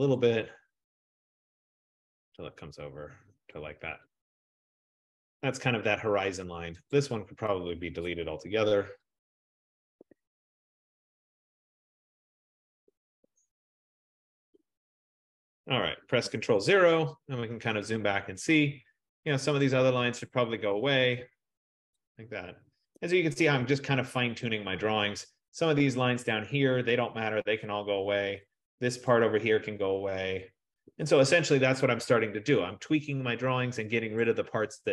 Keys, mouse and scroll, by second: 0.2 click, 3.6 click, 4.2 click, 5.4-6.2 scroll, 6.2-7.1 scroll, 7.1 click, 10.1 click, 10.1 BackSpace, 10.5 F15, 12.4 click, 13.3 BackSpace, 14.4 click, 16.7 ctrl+0, 19.7 click, 20.8 BackSpace, 22.1 click, 23.1 BackSpace, 24.5 click, 24.6 BackSpace, 27.0 click, 27.4 BackSpace, 29.2 click, 29.6 BackSpace, 34.3 click.